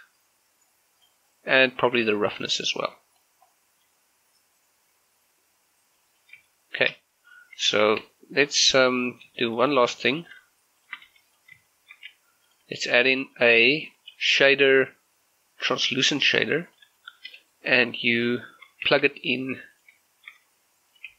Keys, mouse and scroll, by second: 3.9-6.1 middle drag, 6.1 scroll up 1, 6.3 scroll down 1, 6.6 shift+middle click, 7.8 shift+a, 9.2 scroll down 1, 9.4 shift+middle click, 10.3 click, 10.8 shift+click, 11.2 g, 11.4 click, 11.8 shift+middle click, 12.6 click, 12.7 g, 13.0 click, 13.4 middle click, 13.8 shift+a, 14.4 click, 17.0 shift+middle click, 18.1 click, 19.0 shift+d, 19.8 click, 20.2-21.0 shift+scroll up 2, 21.0 click.